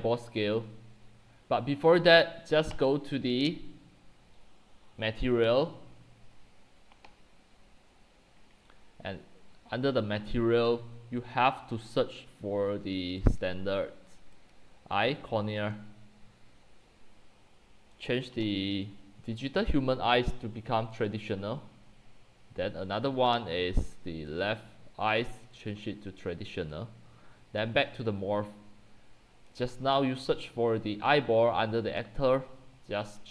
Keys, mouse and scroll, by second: 2.7 typing, 2.9 click, 5.0 middle click, 5.0 scroll, 5.1-9.9 scroll down 23, 9.9-11.4 scroll down 1, 11.4-12.0 middle drag, 11.4 scroll, 13.4-19.8 drag, 25.3-33.3 drag.